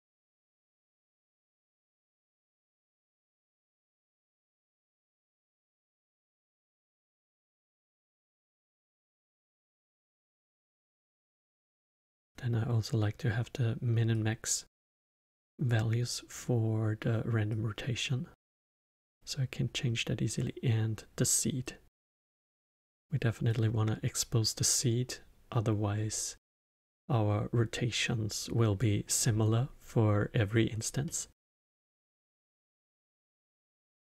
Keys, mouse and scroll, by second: 0.1 click, 1.0-4.1 drag, 7.9-8.7 middle drag, 8.7-9.8 scroll down 2, 9.8 middle click, 10.3-10.9 scroll down 2, 10.9 scroll down 2, 11.2-11.8 middle drag, 11.8-14.1 scroll up 1, 14.1 click, 17.5 click, 21.6 click, 31.0-32.5 middle drag, 32.5-33.2 scroll up 2, 33.2-33.7 middle drag, 33.7 scroll down 2.